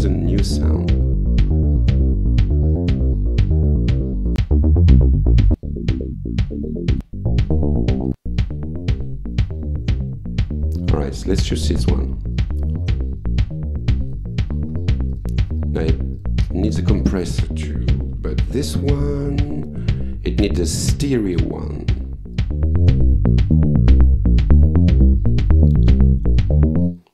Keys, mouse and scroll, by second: 0.6 click, 2.7 click, 4.3 click, 5.5 click, 6.9 click, 8.1 click, 11.8 click, 14.1 click, 15.1 click, 15.5 right click, 16.2 click, 17.6-19.1 typing, 20.5 click, 22.4-23.5 drag, 25.5 click, 26.8 click.